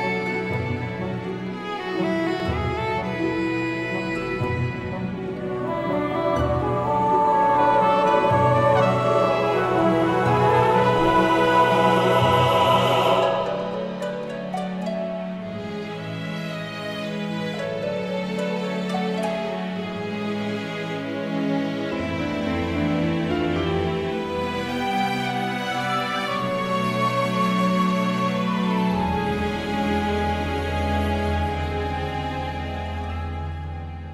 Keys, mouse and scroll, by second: 0.1 z, 0.7 KP_1, 3.1 click, 4.2 click, 4.6-7.7 middle drag, 8.3 f, 13.1 f, 15.9 f, 20.3 f, 24.7 f, 25.5 click, 29.5 f, 29.8-32.6 middle drag, 33.1 f.